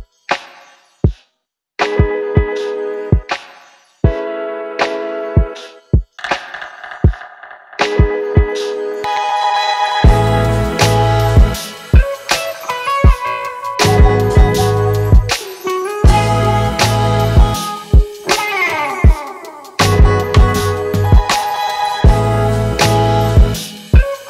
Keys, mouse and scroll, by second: 8.5 ē.